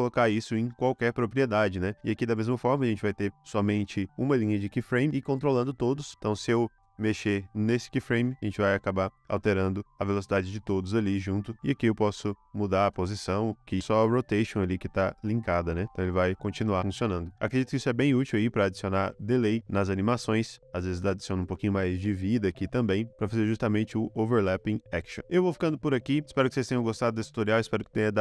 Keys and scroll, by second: 1.9 space, 5.1 space, 6.7 space, 8.9 space, 10.6 space, 14.5 space, 17.4 space.